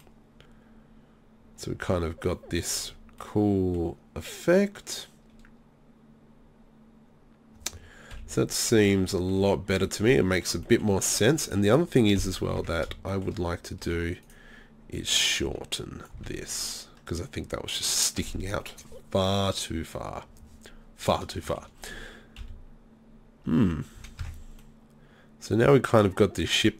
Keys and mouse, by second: 8.1 KP_3, 12.2 KP_3, 12.6 Tab, 13.8 z, 14.3 right click, 16.2 z, 16.4 middle click, 22.4 KP_3, 23.5 z, 24.0 z, 24.2 Tab.